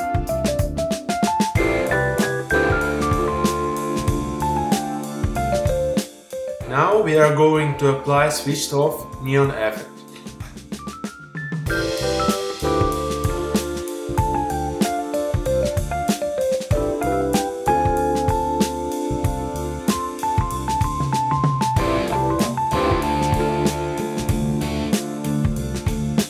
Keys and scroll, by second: 18.5 super+i, 20.0 space.